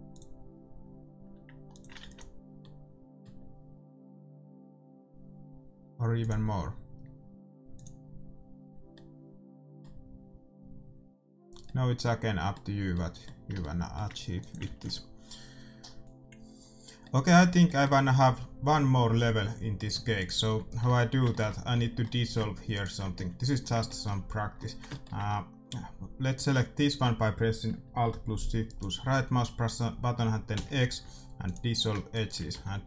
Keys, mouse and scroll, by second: 0.2-3.7 drag, 2.1 ctrl+s, 2.7-4.7 middle drag, 6.3-9.6 drag, 9.1-11.1 middle drag, 11.9-15.0 middle drag, 14.7-16.0 drag, 15.0 ctrl+s, 17.1 middle click, 20.4-21.9 right drag, 20.8 Tab, 21.7 a, 22.7-24.4 right drag, 23.7-26.8 middle drag, 26.3 a, 28.6-30.4 right drag, 30.5 x, 32.1-32.8 right drag, 32.5 x.